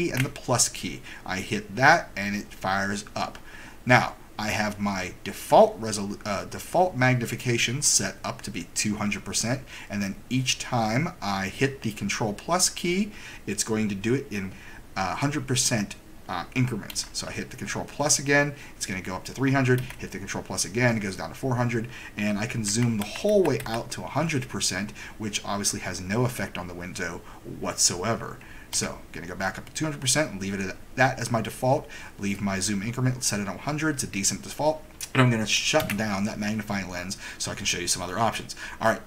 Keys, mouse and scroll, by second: 0.0 super+=, 16.9 super+=, 19.7 super+=, 22.7 super+-, 23.0 super+-, 23.3 super+-, 23.6 super+-, 28.8 super+=, 35.8 super+Escape.